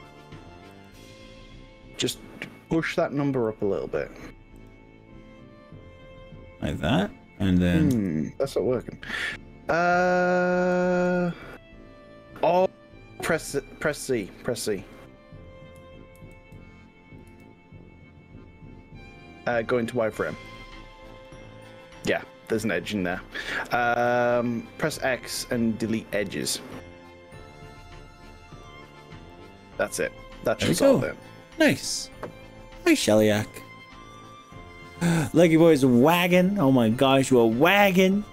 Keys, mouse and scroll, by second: 0.8 click, 3.6 click, 4.6 click, 8.0 Return, 9.8 click, 10.8 click, 11.4-12.6 drag, 14.0 click, 16.2 ctrl+z, 17.3 z, 21.3-22.8 middle drag, 24.1 Delete, 29.4-30.4 middle drag.